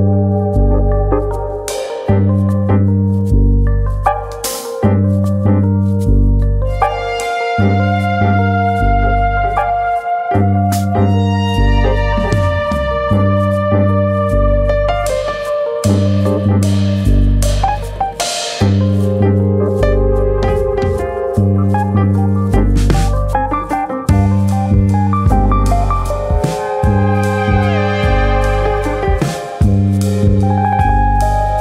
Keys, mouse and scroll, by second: 1.3 e, 2.8 click, 3.2 click, 5.2 r, 5.9 click, 6.7 e, 8.0 click, 8.8 r, 10.4 click, 10.6 r, 10.6 e, 11.1 click, 11.4 click, 12.4 r, 13.4 click, 14.0 click, 15.2 r, 16.0 click, 17.2 r, 17.8 click, 18.3 click, 18.4 alt+click, 20.2 alt+click, 20.7 alt+click, 22.0 alt+click, 22.5 click, 26.2 ctrl+KP_Add, 27.4 click, 28.7 e, 29.3 click, 29.6 click, 30.8 alt+click, 31.0 alt+click, 31.3 click.